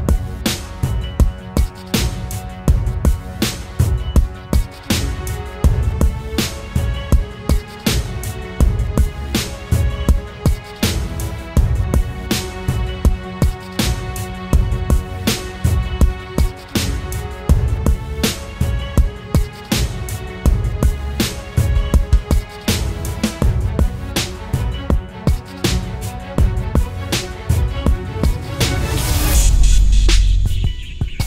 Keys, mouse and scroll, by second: 7.0-8.5 typing, 10.0-10.4 typing, 13.3 double click, 27.4 double click.